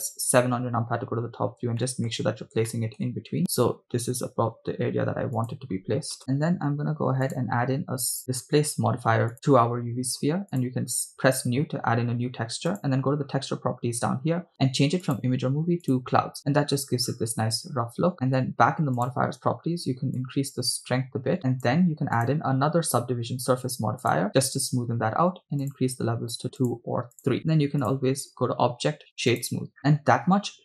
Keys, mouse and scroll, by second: 0.1 KP_7, 0.9-1.6 scroll down 5, 1.9 shift+middle click, 2.4 scroll up 2, 2.8 shift+middle click, 4.3 g, 5.5 click, 7.3 click, 8.2-9.3 drag, 10.6 click, 12.7 click, 15.1-16.2 drag, 18.1 scroll down 2, 19.1 click, 20.2-21.8 drag, 22.6-24.3 drag, 25.6 click, 26.6 click, 27.2 click, 27.9-29.7 drag.